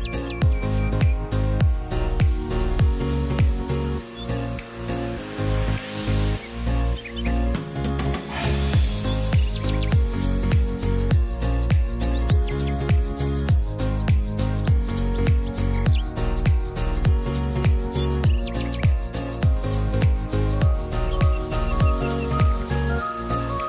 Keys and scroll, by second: 16.2 t, 19.8 e.